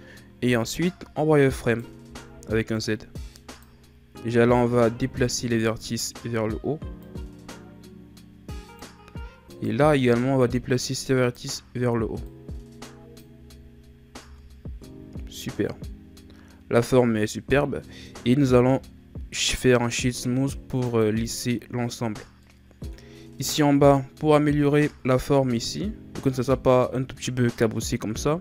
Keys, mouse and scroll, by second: 0.5 z, 1.6 right click, 2.0 b, 5.5-9.5 drag, 9.5 right click, 9.8 b, 12.2-13.4 drag, 13.4 z, 14.2 Tab, 15.5-18.3 middle drag, 18.3 w, 22.4-23.1 middle drag, 23.1-23.7 scroll up 2, 23.7-24.3 middle drag, 24.3-24.8 shift+scroll up 1, 24.8-28.4 middle drag.